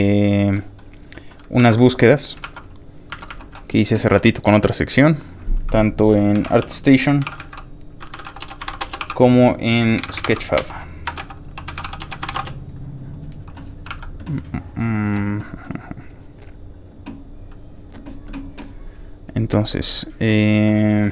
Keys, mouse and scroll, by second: 0.3 ctrl+click, 0.6 ctrl+middle click, 1.1 ctrl+middle click, 1.6 ctrl+Tab, 2.3 alt+Tab, 4.9 ctrl+click, 5.2 ctrl+click, 6.1-6.9 typing, 8.0-12.8 typing, 13.9 alt+Tab, 14.8 alt+click, 16.0 alt+click, 16.4-17.0 scroll down 3, 17.5 click, 19.3 alt+click.